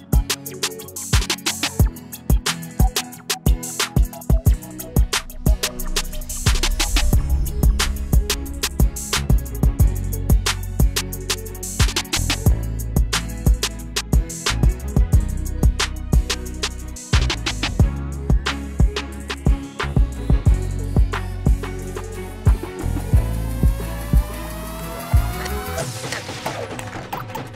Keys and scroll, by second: 1.9 u, 8.5 Up, 23.2 ctrl+z, 23.8 ctrl+z.